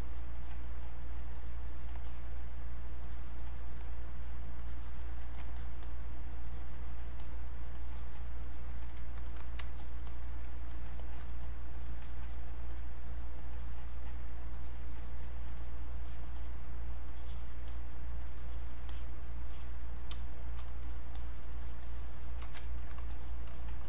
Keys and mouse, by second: 3.0 alt+click, 4.6 alt+click, 6.3 alt+click, 7.7 alt+click, 8.4-12.7 alt+drag, 13.4 alt+click, 14.5 alt+click, 15.6 click, 16.4 click, 17.1 alt+click, 18.2-20.2 alt+drag, 20.2 space, 20.4-22.6 drag, 22.6 ctrl+right click, 23.1 shift+click.